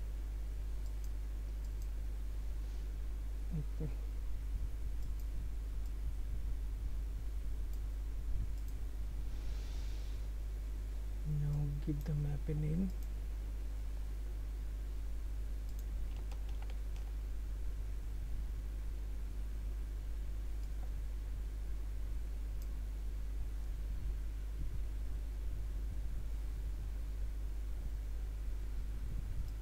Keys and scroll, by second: 17.1 ctrl+c, 17.4 ctrl+v.